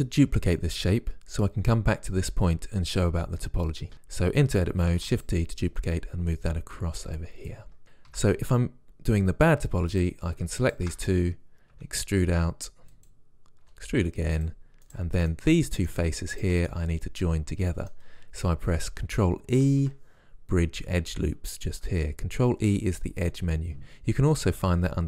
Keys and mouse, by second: 3.9 Tab, 4.9 shift+d, 5.7 click, 6.4 click, 6.8 click, 7.7 click, 7.8 right click, 8.1 Tab, 9.9-12.6 drag, 11.6 e, 13.7 e, 14.9-15.9 drag, 17.0-18.3 drag, 19.6 ctrl+e.